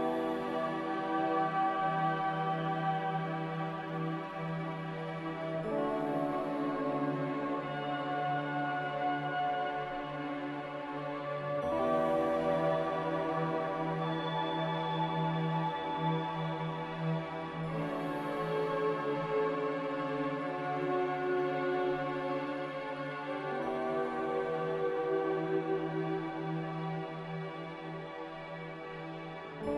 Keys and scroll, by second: 22.9 z, 25.2 Escape.